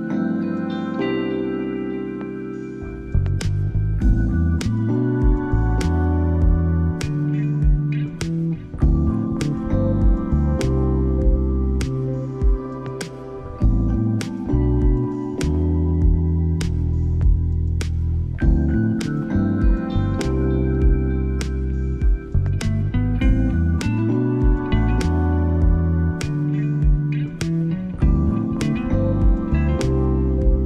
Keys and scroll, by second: 10.7 ctrl+b, 20.4 Caps_Lock, 26.5 ctrl+z.